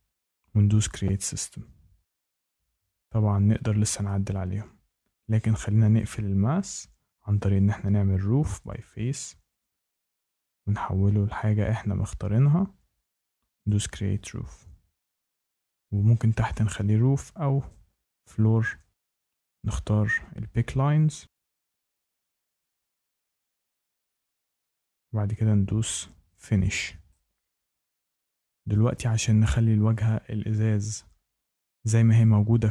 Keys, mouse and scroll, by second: 0.8 click, 4.0 shift+middle click, 5.5 Escape, 7.6 click, 8.6 click, 9.5 click, 10.4 click, 12.4 click, 13.6 click, 17.6 click, 19.1 click, 21.2 Tab, 21.9 shift+right click, 23.2 Tab, 23.5 Tab, 24.2 click, 26.3 click, 27.5 shift+middle click, 28.7 shift+middle click.